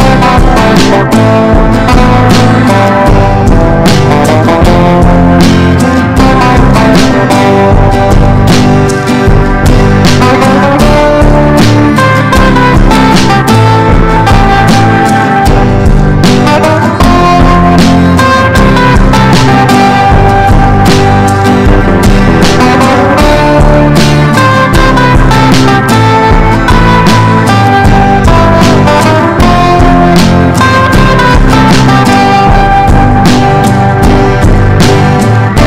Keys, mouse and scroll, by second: 10.9 ctrl+g, 12.0 click, 13.3 Down, 13.6 Down, 14.6 Down, 15.4 click, 22.4 KP_0, 22.7 KP_1, 23.3-27.6 drag, 28.2 ctrl+b, 28.8-34.1 drag, 34.5-34.9 typing.